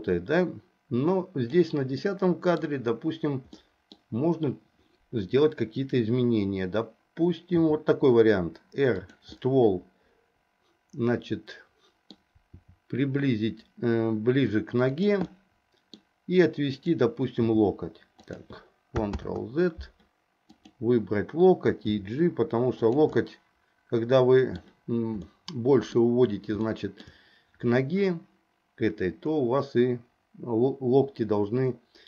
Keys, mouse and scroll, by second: 2.2 middle click, 3.7 middle click, 7.7 r, 9.4-12.3 middle drag, 12.7 r, 15.4 middle click, 16.9 click, 17.6 g, 19.3 ctrl+z, 22.0 g, 23.3 scroll up 1, 23.4-24.7 middle drag, 25.4-26.2 scroll up 1, 26.7-27.3 shift+scroll up 1.